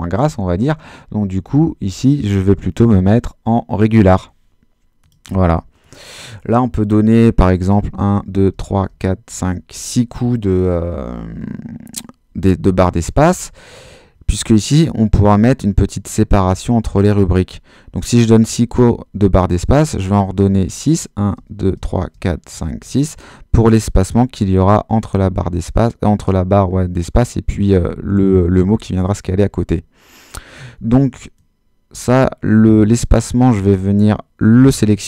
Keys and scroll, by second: 7.7 space, 20.2 space, 21.3 space.